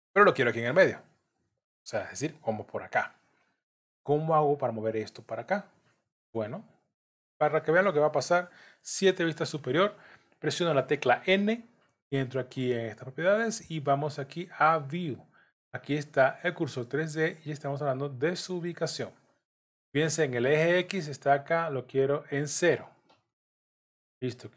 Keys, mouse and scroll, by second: 8.4 KP_7, 10.8 n, 14.5 click, 22.2 click.